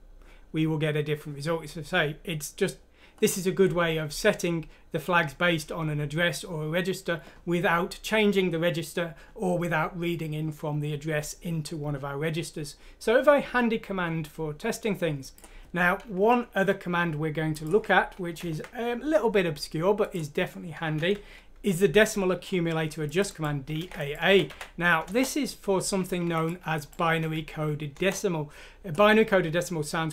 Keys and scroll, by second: 18.4 ctrl+Home, 21.0 Home, 23.8 ctrl+c, 25.0-25.9 typing, 27.2 F6, 28.0 Return.